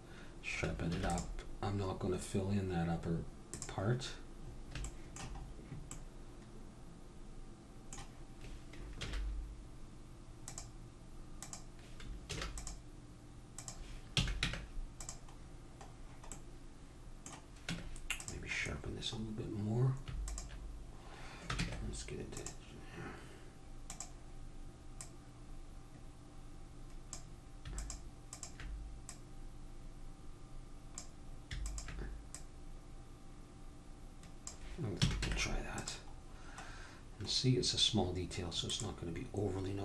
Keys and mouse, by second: 1.0 ctrl+r, 4.5-7.8 middle drag, 9.0 ctrl+r, 12.5 ctrl+r, 14.1 a, 14.4 Tab, 15.4 middle click, 16.4-18.3 middle drag, 17.7 Tab, 18.7-20.3 middle drag, 20.3-22.2 drag, 21.6 ctrl+Tab, 23.9-26.9 drag, 27.8-30.8 drag, 31.6-34.1 drag, 35.0 a, 35.2 Tab, 36.3 middle click, 37.4-38.6 middle drag, 38.7-39.8 drag.